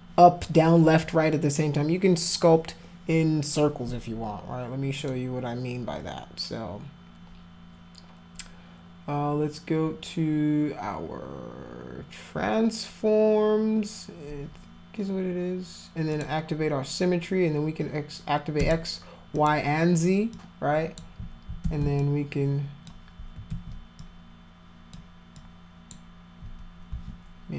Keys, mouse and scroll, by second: 5.0 click, 16.1 click, 18.6 click, 19.3 click, 20.3 click, 21.6 ctrl+z, 22.0 alt+click, 23.5 ctrl+z, 24.0 click, 25.4 click, 26.9 ctrl+z.